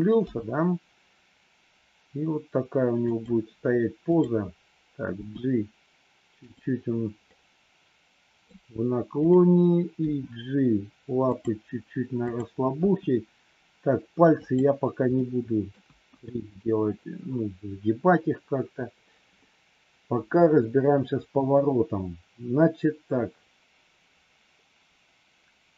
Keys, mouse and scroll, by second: 0.2 g, 5.1 g, 7.2 scroll up 1, 7.4-8.4 middle drag, 8.4 scroll down 1, 9.1 click, 10.0 g, 12.2 click, 15.1 middle click, 15.9 KP_1.